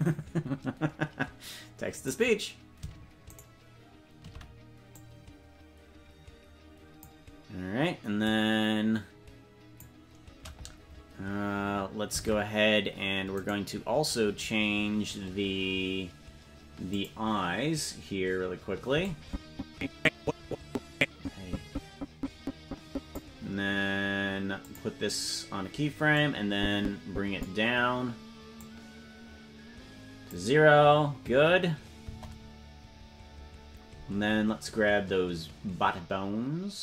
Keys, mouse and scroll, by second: 2.3 right click, 3.7 shift+right click, 5.4-6.4 drag, 7.0 click, 8.5-10.4 drag, 12.6 ctrl+Tab, 13.8 right click, 17.0 click, 19.4-23.7 drag, 25.0 click, 26.7-27.8 drag, 28.9-30.8 drag, 32.4 KP_0.